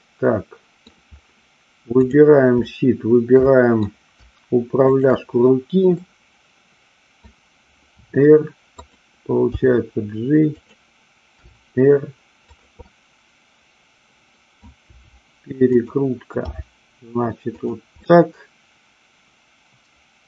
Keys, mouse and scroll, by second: 2.0-2.6 drag, 3.4-3.8 middle drag, 4.8-6.2 shift+drag, 6.2-7.2 middle drag, 8.0 r, 8.8 click, 9.5 g, 11.4 r, 12.7-14.6 middle drag, 14.8 r, 15.7 click, 16.5 g, 17.6 click, 18.0-20.2 middle drag.